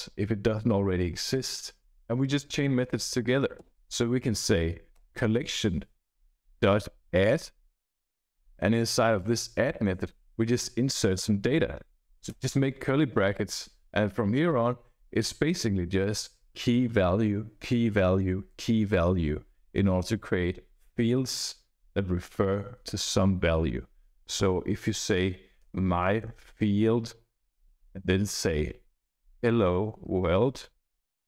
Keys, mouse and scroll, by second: 3.5 ., 4.8 Return, 6.2-8.3 typing, 11.0 space, 11.1 shift+[, 12.2 Return, 25.3-30.8 typing.